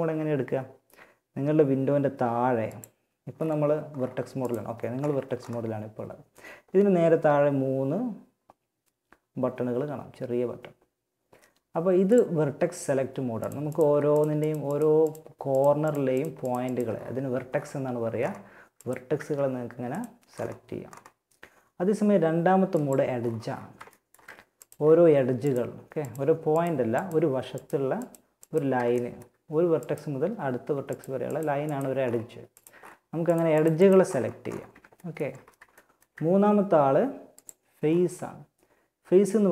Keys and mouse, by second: 1.9-3.7 drag, 11.2-12.6 drag, 12.6 middle click, 18.4 g, 22.0-23.8 drag, 29.2-36.6 middle drag, 36.6-39.3 drag, 39.3-39.5 right drag.